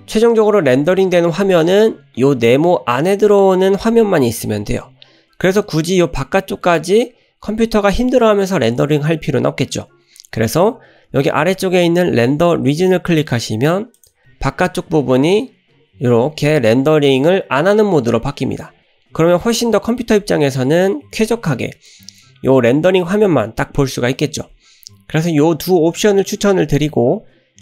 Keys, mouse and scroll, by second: 14.0 click, 21.8-23.1 middle drag.